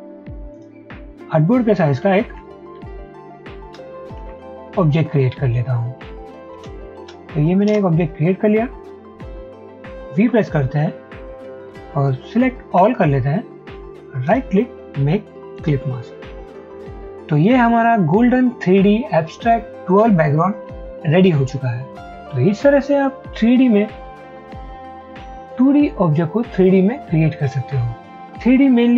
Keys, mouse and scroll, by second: 1.8-3.8 typing, 4.3 Tab, 5.0 typing, 6.1-7.6 typing, 7.8 Return, 10.3 v, 12.8 v, 14.3 right click.